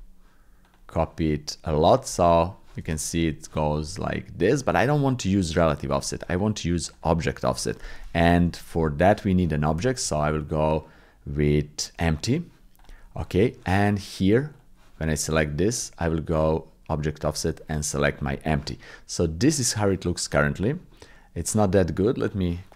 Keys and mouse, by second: 2.0 click, 2.1 click, 2.9 shift+click, 5.8 click, 6.9 click, 7.4 click, 8.4 KP_7, 9.0 shift+click, 10.0 shift+a, 17.2-18.2 drag, 19.6 middle click, 20.9 click, 22.2-22.7 drag.